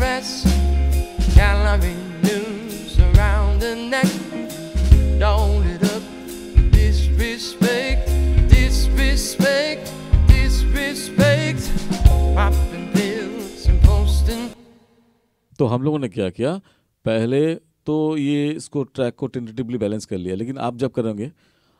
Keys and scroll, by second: 14.6 space.